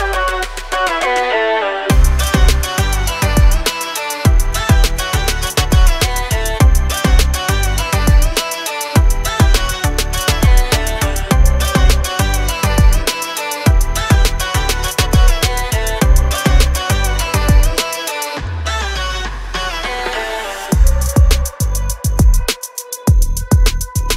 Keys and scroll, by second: 1.0 r, 17.5 space, 17.9 e, 19.2 space, 19.8 Delete, 23.4 m.